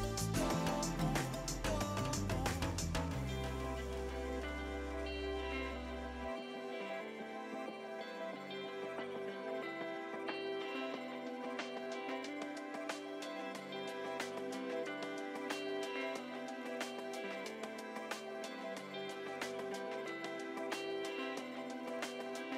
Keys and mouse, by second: 4.7 shift+w, 5.1 Return, 5.5 click, 12.0 Delete, 12.6 click, 12.8 Delete, 13.1 click, 13.2 Delete, 15.2 click, 15.7 Delete, 15.8 click, 17.3 click, 17.6 Delete, 17.7 click, 18.2 Delete, 18.3 click, 20.0 Delete, 20.1 click, 20.5 Escape, 20.7 click, 21.0 s, 21.3 click, 21.5 ctrl+click, 22.0 s.